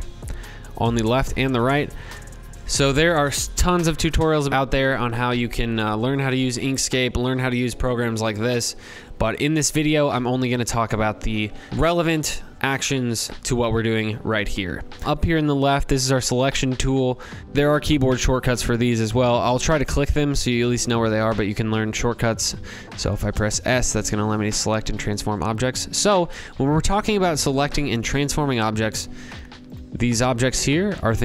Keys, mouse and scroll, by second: 28.6-31.2 drag.